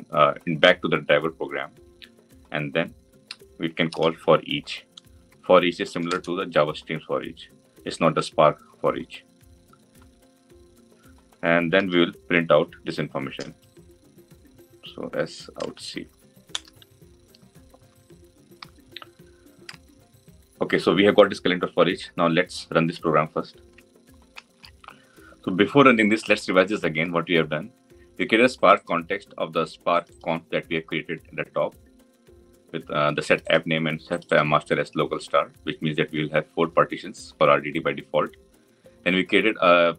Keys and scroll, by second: 5.9 Return, 16.4 Return.